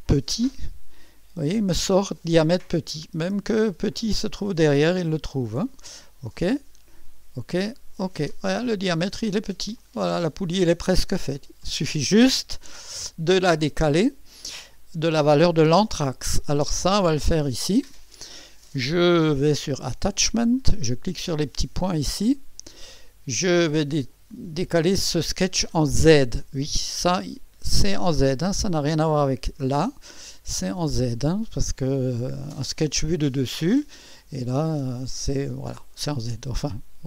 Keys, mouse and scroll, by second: 0.0-0.3 typing, 5.0 click, 6.3 click, 7.7 click, 9.8 click, 12.6-13.5 typing, 17.2 click, 20.4 click, 21.8 click.